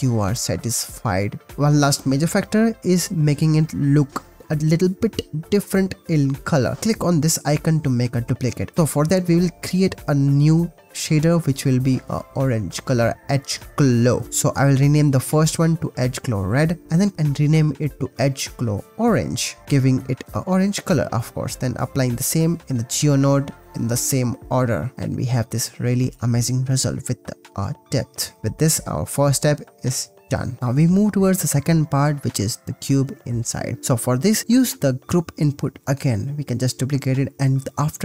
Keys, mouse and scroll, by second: 2.6 click, 4.2 click, 5.4 click, 6.7 click, 8.5-11.0 drag, 11.4 click, 11.5-12.6 drag, 14.9 middle click, 15.6 middle click, 17.1 shift+BackSpace, 18.0-18.4 middle drag, 18.4 click, 18.6-19.7 middle drag, 19.6 ctrl+s, 23.8 click, 24.8-28.7 middle drag, 28.9-29.2 middle drag, 29.8 middle drag, 32.3 ctrl+s, 32.6 click, 33.5 click, 34.2 click, 34.5 drag, 35.5 shift+d, 35.9 click, 36.4 click, 36.6 click, 37.1 drag.